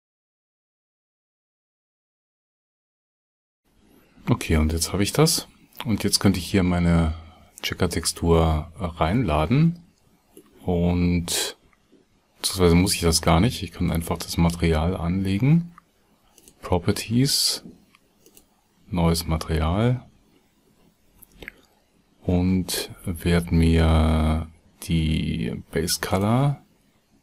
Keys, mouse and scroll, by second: 1.5 alt+g, 21.1 Tab.